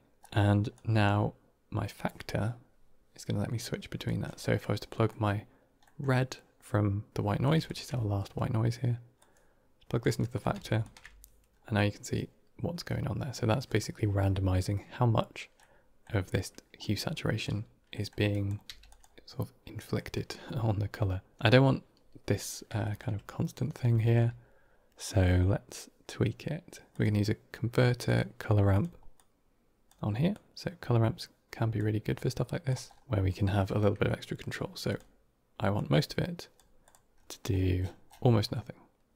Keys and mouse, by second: 0.6-3.9 drag, 4.3 middle click, 5.0 middle click, 5.8 middle click, 7.1 click, 7.5 ctrl+shift+click, 9.0 click, 10.1 middle click, 10.7 ctrl+shift+click, 15.6 middle click, 16.7 click, 17.9 middle click, 18.3 click, 18.5 g, 19.9 middle click, 22.7 shift+middle drag, 23.8 shift+a, 29.0 click, 30.2-31.6 drag, 32.0-32.6 drag, 34.8 click, 35.6-36.4 drag, 36.7 click.